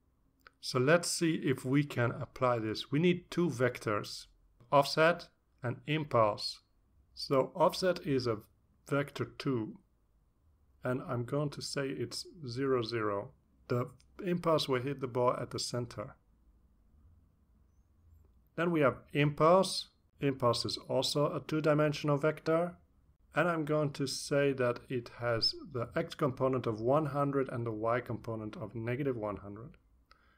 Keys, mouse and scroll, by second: 0.2-5.0 typing, 6.6-21.4 typing, 17.8 Return, 23.4-25.7 typing, 26.2 Return, 27.3 scroll down 2, 28.0 Return.